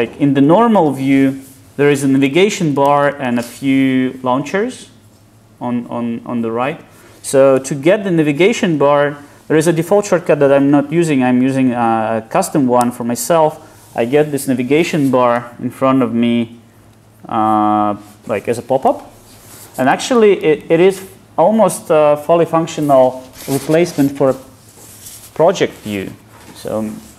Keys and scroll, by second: 12.9 super+Up.